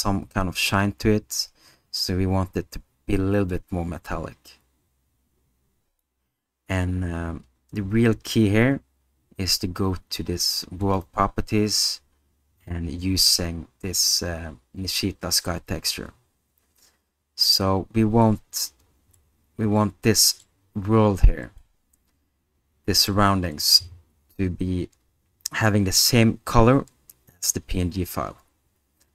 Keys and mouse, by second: 3.7-6.0 drag, 10.8 click, 19.2-20.5 middle drag, 21.6-23.1 middle drag.